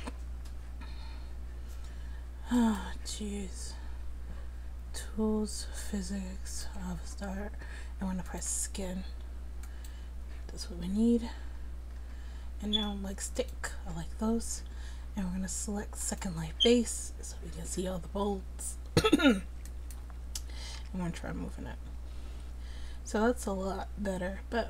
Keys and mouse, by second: 0.6 middle click, 2.6-11.5 drag, 13.4-21.2 drag, 20.8 r.